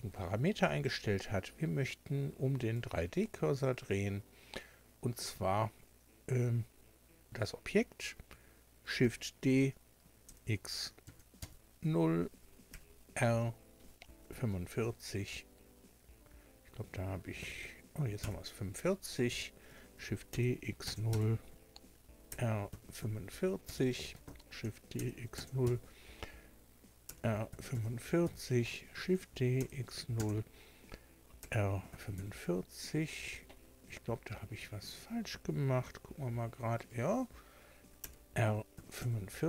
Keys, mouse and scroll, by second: 0.8 click, 2.6 click, 9.0 shift+d, 10.2 x, 11.0 KP_0, 11.4 KP_Enter, 12.7 r, 14.3 KP_4, 17.4 KP_5, 18.2 KP_Enter, 20.0 shift+d, 20.3 x, 20.8 KP_0, 21.1 KP_Enter, 22.3 r, 22.7 KP_4, 23.6 KP_Enter, 24.6 d, 25.0 x, 25.4 KP_0, 25.6 KP_Enter, 27.0 r, 27.5 KP_4, 27.7 KP_5, 28.2 KP_Enter, 29.0 d, 29.6 x, 30.2 KP_0, 31.4 r, 31.9 KP_4, 32.2 KP_5, 34.4 Escape, 35.8 g, 36.8 right click, 38.0 r, 38.7 KP_4, 39.0 KP_5.